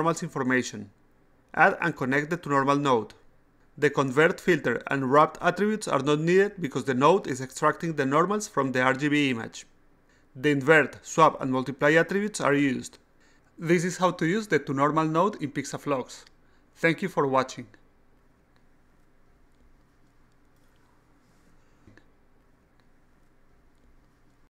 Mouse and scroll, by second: 0.1 click, 0.3 click, 1.3 click, 2.7 click, 4.9 click, 5.5 click, 6.1 click, 7.2 click, 7.6 click, 8.3 click, 9.7 click, 10.2 click, 10.9 click, 11.3 click, 12.6-13.8 drag, 15.0-24.6 drag.